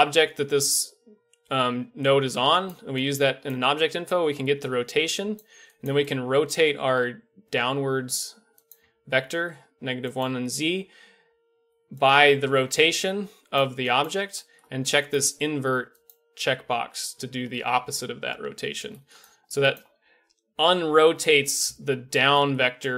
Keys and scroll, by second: 8.8 Tab, 10.3 Tab, 22.6 Tab.